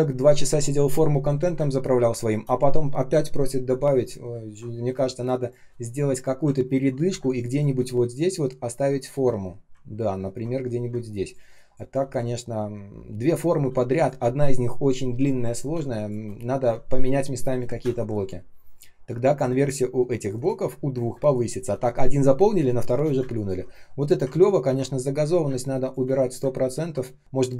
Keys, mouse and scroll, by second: 2.0 space, 4.3 ctrl+scroll down 1, 4.8 space, 5.3 space, 5.4 space, 6.5 ctrl+scroll down 1, 7.1 space, 7.6 space, 7.6 space, 8.9 ctrl+scroll up 1, 10.0-10.8 ctrl+scroll down 1, 10.8 space, 11.3 space, 11.4 space, 13.6 space, 15.7 space, 17.7 space, 18.2 space, 18.3 space, 23.1 space, 24.3-24.7 ctrl+scroll up 1, 25.4 space, 25.9 space, 25.9 space, 26.6 ctrl+scroll up 1.